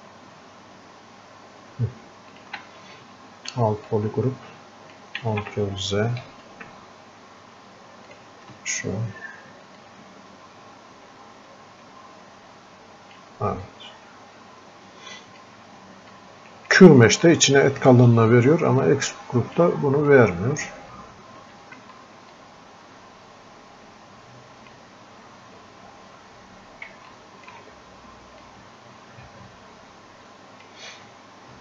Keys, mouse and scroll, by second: 3.9-5.3 drag, 5.3 ctrl+z, 6.3 space, 9.8-18.9 drag, 18.9 click, 20.1-22.4 drag, 22.4-25.3 drag, 25.3-26.0 scroll up 1, 26.2 scroll down 1, 27.1-28.4 alt+drag, 28.4-31.6 drag.